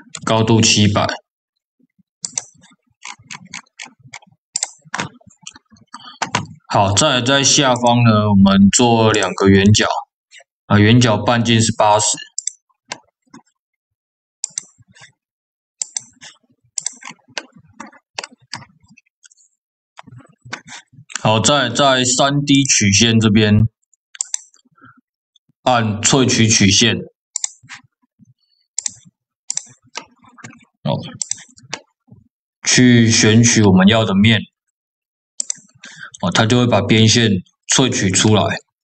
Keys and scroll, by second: 0.0 KP_0.